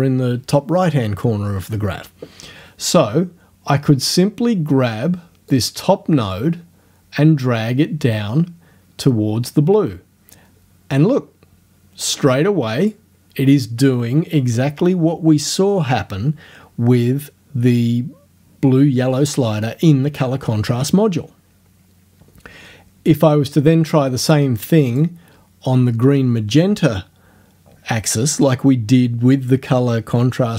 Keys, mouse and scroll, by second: 5.5-13.1 drag, 24.9 click.